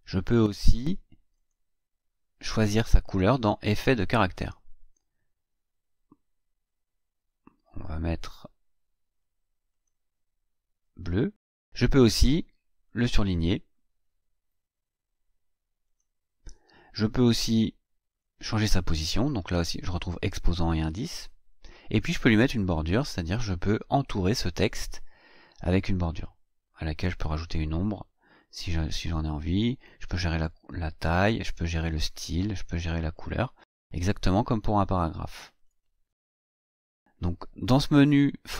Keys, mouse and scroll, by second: 1.3 click, 4.2 click, 9.7 click, 12.8 click, 15.8 click, 18.1 click, 21.8 click, 24.2 click, 31.7 click, 32.2 click, 33.0 click, 33.4 click, 35.5 click, 36.9 click.